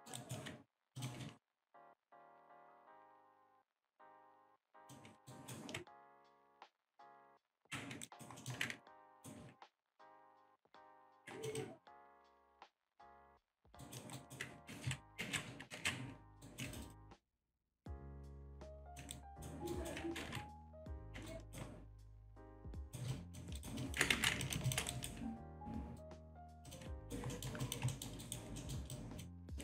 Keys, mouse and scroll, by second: 0.0 alt+middle click, 0.2 alt+right click, 1.0 click, 1.8 click, 2.3-2.7 scroll down 1, 2.8-3.4 scroll down 2, 4.2 click, 5.3 alt+right click, 6.0 ctrl+click, 8.1 alt+right click, 8.4 alt+middle click, 8.9 ctrl+right click, 10.0 click, 10.6 2, 11.0 click, 13.8 alt+right click, 14.2 alt+right click, 14.7 ctrl+z, 15.2 ctrl+z, 15.8 ctrl+z, 16.4 alt+right click, 17.4 click, 19.1 alt+right click, 19.7 alt+right click, 20.3 1, 21.3 ctrl+right click, 22.4 click, 22.9 alt+right click, 23.1 alt+click, 23.6 alt+right click, 24.4 alt+click, 24.9 alt+right click, 26.7 click, 27.0 alt+right click, 27.3 alt+middle click, 27.6 alt+click, 27.9 alt+middle click, 28.2 alt+right click, 28.6 alt+middle click, 28.9 alt+click, 29.4 alt+middle click.